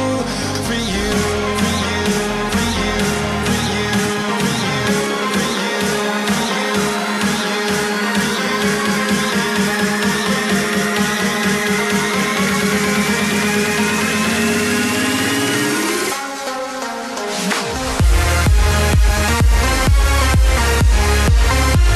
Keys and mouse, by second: 0.9 s, 1.8 click, 3.6 g, 5.7 click, 8.9 s, 9.8 click, 12.1 e, 13.8 click, 16.5 r, 18.1 click, 20.3 s.